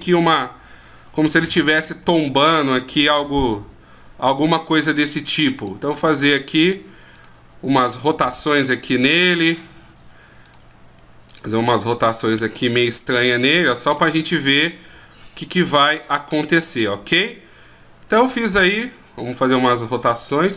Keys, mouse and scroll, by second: 2.4 right click, 2.7 r, 5.0 right click, 5.6 right click, 6.1 r, 7.8 right click, 8.1 r, 9.5 right click, 9.8 r, 11.3 right click, 12.9 right click, 13.1 r, 14.6 right click, 18.1 right click.